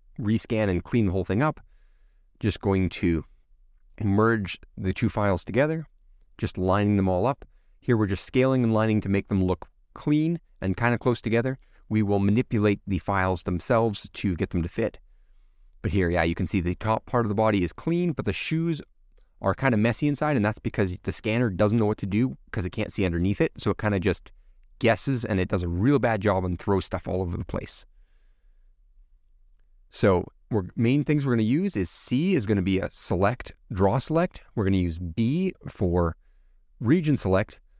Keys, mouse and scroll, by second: 0.4 middle click, 0.7 click, 0.8 middle click, 1.3 scroll down 5, 1.4 click, 1.9 middle click, 2.2 click, 2.9 click, 3.3 click, 3.5 middle click, 3.6 click, 4.3 click, 4.7 middle click, 9.7-11.2 middle drag, 12.4 middle click, 13.3-13.9 scroll down 3, 13.9 middle click, 14.6-15.1 scroll up 1, 15.1-16.5 middle drag, 16.5 scroll up 5, 16.8-17.9 middle drag, 17.9 scroll down 2, 18.9-21.3 middle drag, 21.6 scroll down 1, 21.9-22.9 scroll up 4, 23.0-24.5 middle drag, 24.7 scroll down 4, 25.0 click, 25.4 click, 26.7 click, 27.2-27.7 scroll up 10, 27.7-28.1 scroll down 1, 28.1 click, 28.3-32.0 middle drag, 32.0 c, 36.9 click, 37.3 click, 37.5-37.7 middle drag.